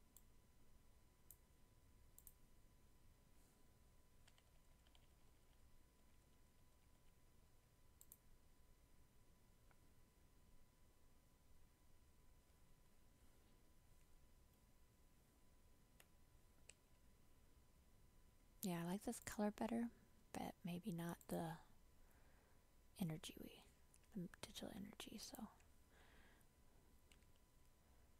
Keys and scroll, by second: 16.8 ctrl+j.